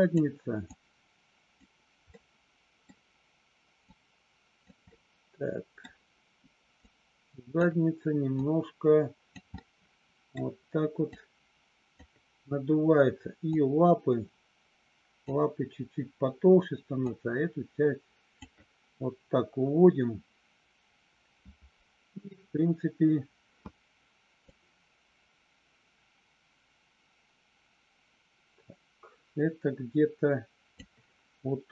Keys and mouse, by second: 0.7 click, 2.1 middle click, 3.8 click, 4.8 middle click, 6.7 click, 8.3 click, 9.6 middle click, 11.1 click, 13.4-15.2 drag, 17.0-18.4 drag, 24.6-30.8 drag.